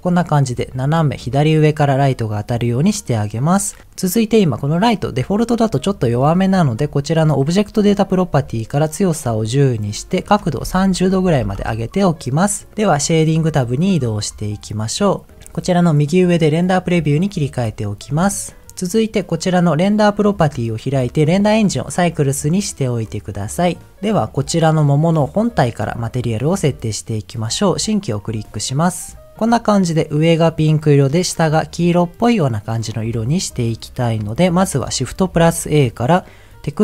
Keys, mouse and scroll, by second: 7.5 click, 8.7-9.8 drag, 10.2-11.5 drag, 14.0 click, 17.3 click, 17.7-18.1 scroll up 4, 18.2 shift+middle click, 18.5 scroll up 2, 18.6 middle click, 20.3 click, 21.7 click, 23.6 click, 24.0 click, 24.6-26.5 middle drag, 27.5 click, 28.2-29.1 scroll down 4, 29.1 middle click, 33.5 click, 35.3 shift+a.